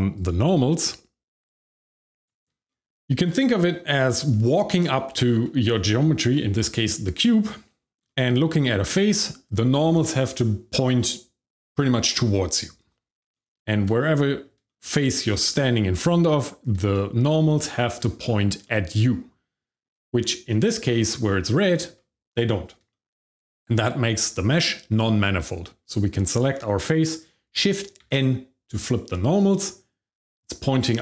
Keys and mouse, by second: 2.3 shift+middle click, 3.0 middle click, 3.3 shift+middle click, 4.1 shift+middle click, 4.5 middle click, 5.1 shift+middle click, 8.0 shift+middle click, 13.1 shift+middle click, 14.1 middle click, 14.6 shift+middle click, 15.3 middle click, 15.9 middle click, 16.9-17.9 shift+middle drag, 18.2 middle click, 18.6-19.8 shift+middle drag, 21.4 shift+middle click, 22.9 shift+middle click, 25.8 click, 28.0 shift+n.